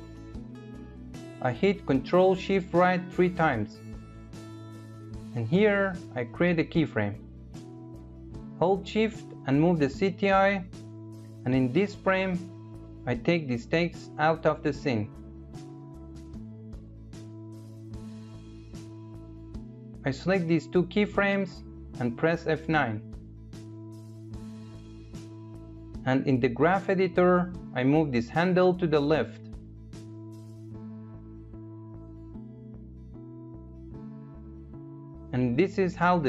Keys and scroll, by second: 1.4 ctrl+shift+-, 24.2 F9.